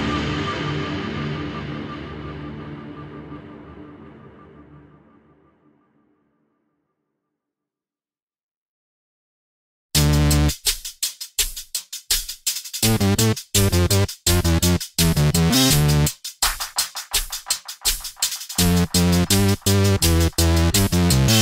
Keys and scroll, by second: 8.3 ctrl+c, 9.6 ctrl+v.